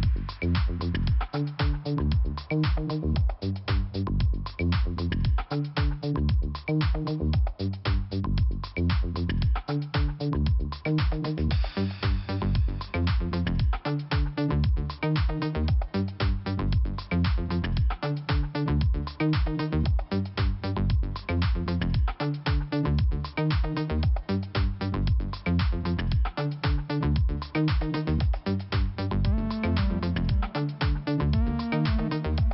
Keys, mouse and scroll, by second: 1.3 click, 1.5 click, 2.3-2.8 typing, 3.2 scroll up 2, 4.0 click, 5.9 click, 7.3 click, 8.0 click, 9.1 click, 10.3 click, 10.8 scroll down 1, 12.2 scroll down 1, 13.1 scroll up 1, 13.6 scroll up 1, 13.6 click, 15.5 click, 17.6 click, 18.9-19.7 scroll down 1, 19.8 click, 21.2 click, 22.6 click, 23.7 click, 24.0 click, 24.5 click, 26.1 scroll up 1, 26.7 scroll down 1, 28.2 click, 28.2 click, 28.8 click, 30.5-30.8 scroll down 2, 32.1 p.